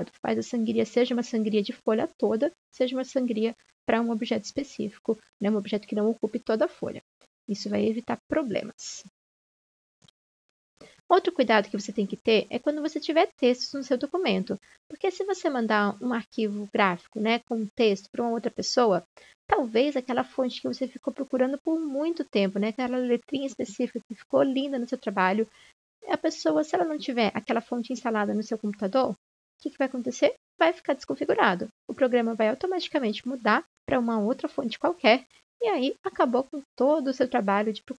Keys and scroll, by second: 5.0 ctrl+z.